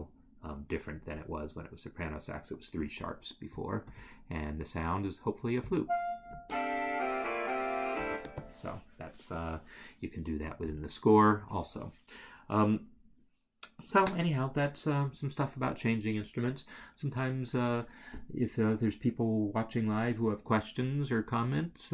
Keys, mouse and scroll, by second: 5.7 click, 6.4 space, 8.0 space.